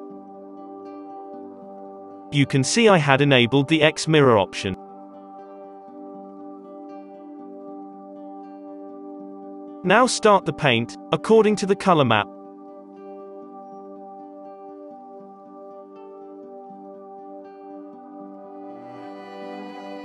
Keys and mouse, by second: 1.8 click, 1.8 f, 1.8 n, 3.4-5.9 drag, 3.7 n, 5.9 middle click, 5.9 KP_5, 6.3 z, 6.6-19.6 drag, 7.2 f, 8.1 f, 11.5 f, 12.1 f, 13.0 f, 15.6 f, 19.3 f.